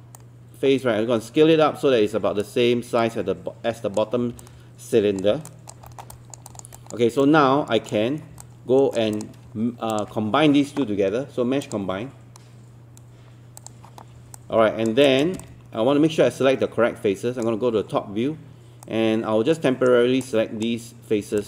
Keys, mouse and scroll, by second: 5.5 alt+click, 5.9 alt+middle click, 6.5 alt+click, 6.8 alt+click, 7.2 alt+click, 8.4 alt+click, 9.2 click, 9.9 shift+click, 11.6 click, 14.4 alt+click, 15.1 alt+click, 15.5-17.7 drag, 18.8 right click, 20.2 click.